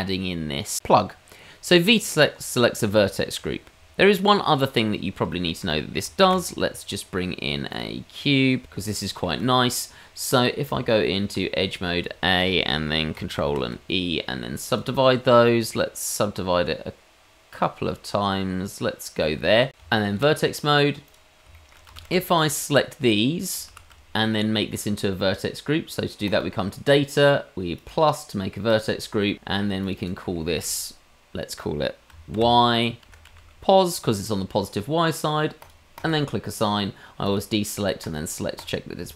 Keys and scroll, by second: 2.8 Tab, 6.2 shift+a, 7.6 g, 10.7 Tab, 11.7 a, 13.5 ctrl+e, 19.7 Tab, 21.9 shift+z, 23.7 shift+z.